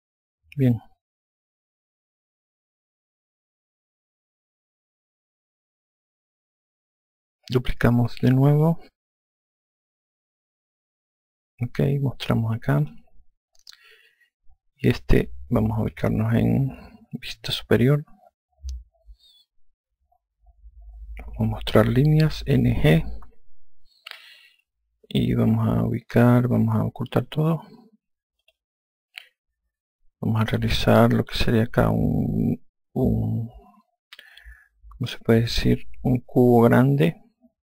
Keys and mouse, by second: 2.2 click, 3.9 alt+click, 9.1 click, 13.1 click, 17.7 F2, 23.2 n, 23.5 g, 29.0 click.